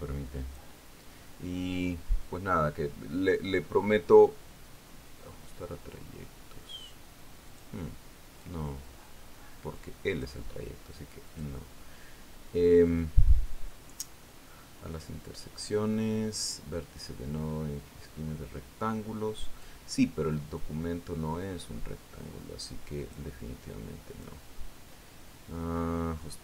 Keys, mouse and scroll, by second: 9.0 click, 9.9-11.9 drag, 12.8 click, 21.0 click, 22.1-25.0 drag, 25.6 click.